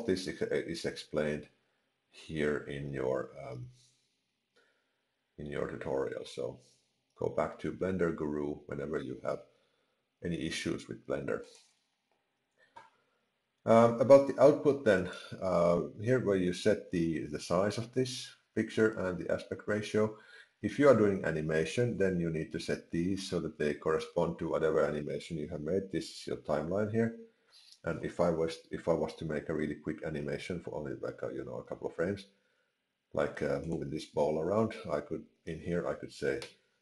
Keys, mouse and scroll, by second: 15.0 click, 33.6 click, 36.4 i.